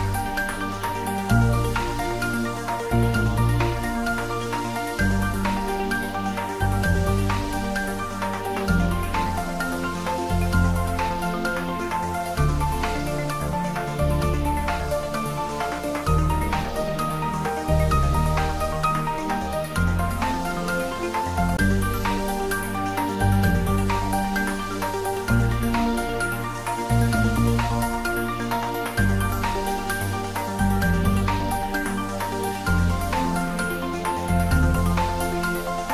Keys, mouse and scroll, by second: 0.6 click, 1.2 s, 1.4 z, 3.4 click, 3.8-5.8 middle drag, 5.8 g, 6.3 x, 7.6 click, 8.6 s, 10.3 click, 12.3 scroll up 1, 13.1-14.1 typing, 14.3 scroll down 1, 14.6 middle click, 15.4 scroll down 1, 15.8-17.8 middle drag, 17.8 g, 18.2 z, 21.6 click, 21.8-23.6 middle drag, 23.6 click, 24.1 scroll up 1, 25.2 g, 26.8 click, 27.3 s, 29.5 click, 30.3-31.4 typing, 31.9 click, 33.0 s, 33.6 z, 35.4 click, 35.7 scroll up 1.